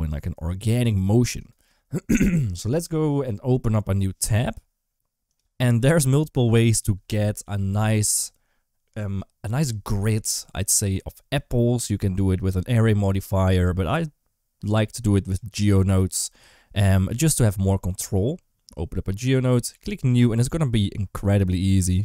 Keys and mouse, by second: 0.4 s, 14.7 click, 15.7-17.3 drag, 19.0 click, 19.8 click, 21.9 shift+a.